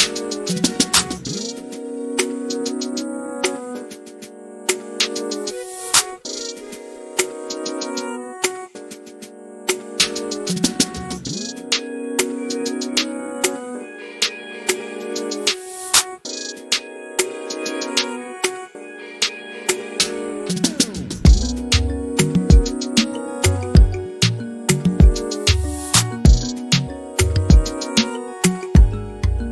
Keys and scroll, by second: 3.8 typing, 6.0-6.7 typing, 7.9-16.5 typing, 19.4-21.1 typing, 25.8 m, 28.5 f.